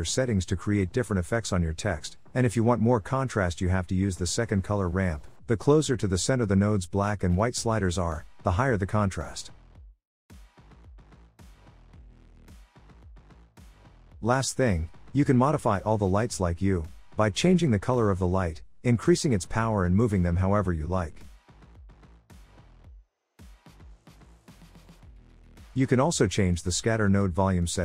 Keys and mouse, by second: 0.5-2.3 drag, 3.0-4.6 drag, 5.0-6.2 drag, 6.6 click, 7.6-8.8 drag, 9.1 middle click, 10.8 click, 16.2 click, 19.8-20.8 drag, 21.9 click, 22.5 click, 25.6 click, 27.0 click.